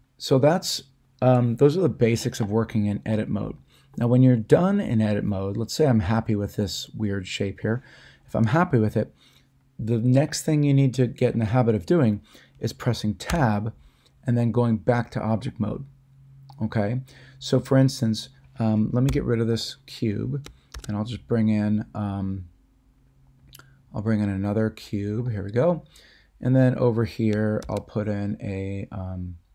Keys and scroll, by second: 13.3 Tab, 19.1 x, 20.7 a, 27.6 shift+a.